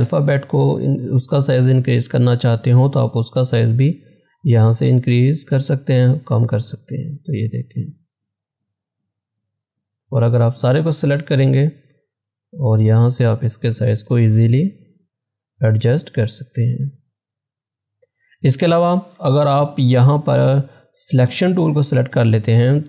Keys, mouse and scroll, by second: 1.8 click, 1.8-5.0 drag, 7.3 click, 16.4 click.